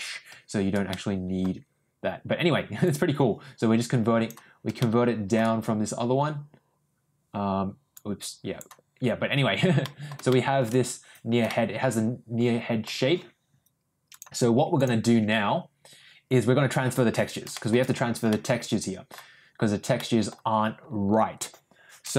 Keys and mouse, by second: 0.9 middle click, 3.1-4.3 drag, 4.7 shift+middle click, 8.2 click, 9.9 middle click, 10.4 shift+middle click, 11.4 middle click, 12.0 middle click, 14.2 click, 17.5 shift+middle click, 18.3 middle click, 19.9 middle click.